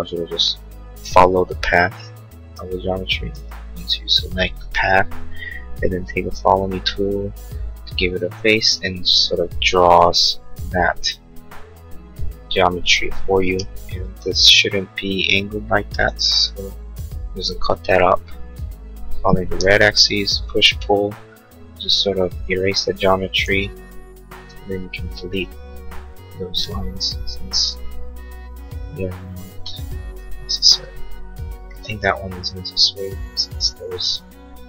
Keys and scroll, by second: 30.7 ctrl+z.